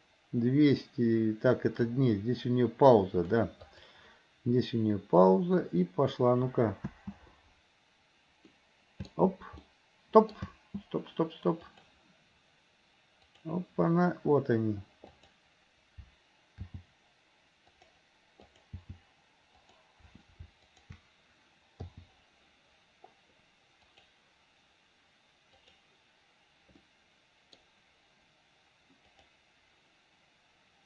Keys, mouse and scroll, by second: 2.7-4.2 drag, 5.3-6.3 drag, 7.0 space, 8.7-9.3 middle drag, 9.7-10.5 middle drag, 10.5 space, 11.8 click, 13.4 click, 15.1 click, 16.6 g, 18.5 click, 18.9 g, 20.7 click, 21.9 i, 24.0 click, 25.7 click, 26.9 middle click, 29.2 click.